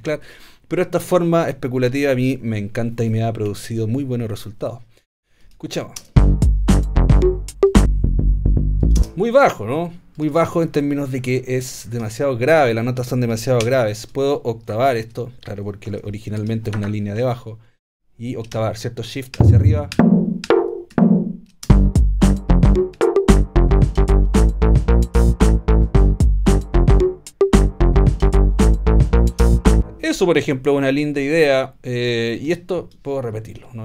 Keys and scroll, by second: 9.0 space, 13.6 b, 15.0 alt+a, 16.7 super+a, 19.4 shift+Up, 20.9 shift+Down, 21.7 shift+space, 22.5 shift+space, 23.0 shift+Up.